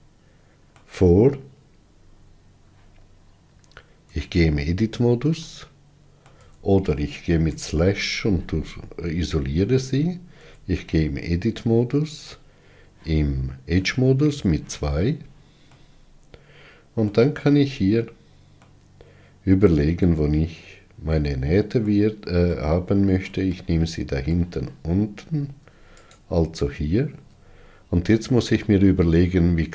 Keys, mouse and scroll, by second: 0.1-1.5 middle drag, 1.5-2.9 scroll up 7, 4.3 Tab, 5.7 middle click, 6.6 Tab, 7.7 KP_Divide, 9.2-10.1 scroll up 5, 10.6 Tab, 11.2-14.5 middle drag, 14.5 2, 15.9-17.7 middle drag, 17.7-18.9 scroll up 4, 18.9-26.3 middle drag, 26.3 alt+click.